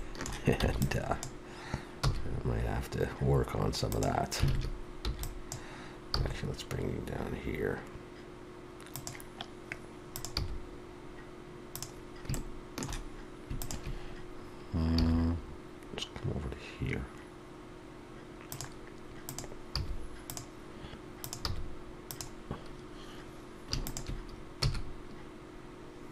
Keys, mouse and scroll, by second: 3.9 e, 8.9 g, 12.3 shift+middle click, 13.6 shift+click, 19.3 click, 20.2 click, 20.2 g, 21.2 click, 21.4 g, 23.8 shift+click.